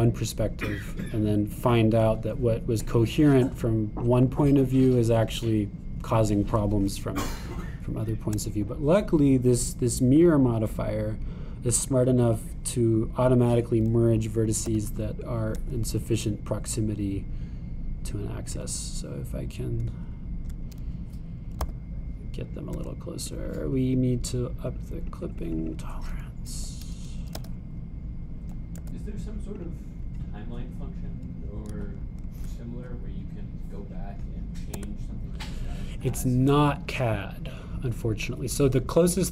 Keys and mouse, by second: 5.0-6.5 drag, 9.0 shift+click, 13.3 click, 15.7 g, 22.6 g, 25.5-30.7 drag, 28.3 g, 35.8 Tab.